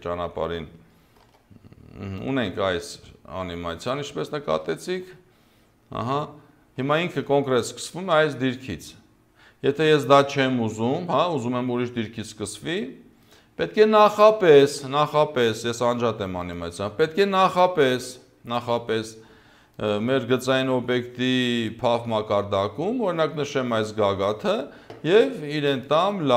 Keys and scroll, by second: 1.2 0, 4.4 0, 6.9 0.